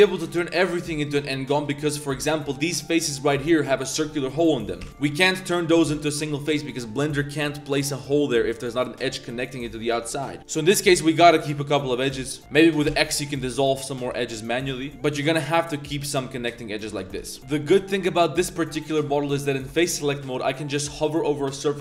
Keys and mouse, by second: 0.1 drag, 0.7 3, 1.0 click, 1.5 shift+click, 2.2 shift+click, 4.8 x, 6.2 2, 6.6 click, 10.4 2, 10.5 click, 10.9 a, 12.1 2, 12.4 ctrl+z, 12.4 x, 12.9 x, 14.0 1, 14.3 a, 14.9 ctrl+z, 16.7 a, 17.2 ctrl+z, 17.4 Tab, 17.4 drag, 17.4 3, 17.4 a, 17.6 shift+drag, 18.1-18.4 drag, 18.5 shift+drag, 18.9 click, 20.2 click.